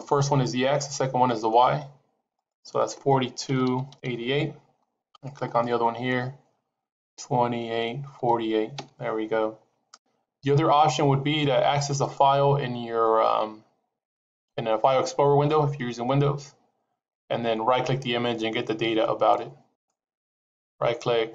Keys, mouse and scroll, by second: 2.3 click, 4.0 KP_8, 5.4 click.